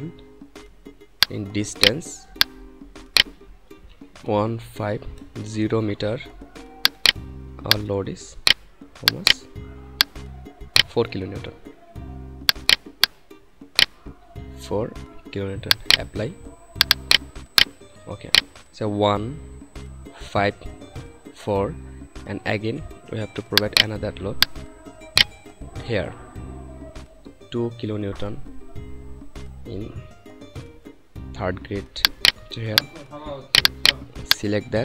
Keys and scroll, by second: 4.0 1, 4.7 5, 5.3 0, 14.1 4.